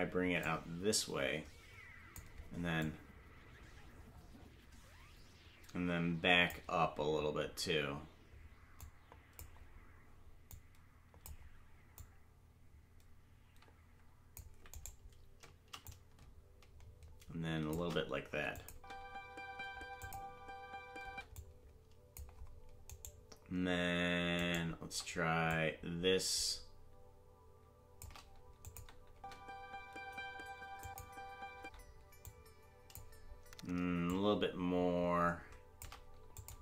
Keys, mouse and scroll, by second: 0.4 click, 2.8 click, 8.8 click, 10.5 click, 11.9 click, 14.8 right click, 15.8 click, 18.5 click, 18.7 space, 20.0 click, 21.0 space, 21.3 click, 23.1 right click, 24.5 shift+right click, 25.4 click, 28.6 click, 29.1 space, 30.8 click, 31.5 space, 32.2 click, 34.0 click, 36.3 click, 36.5 space.